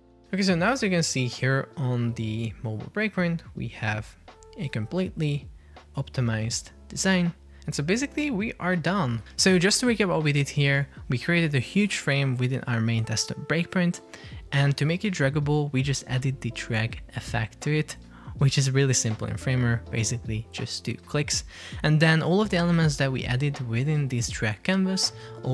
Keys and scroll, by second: 0.0 shift+Left, 7.1 Escape.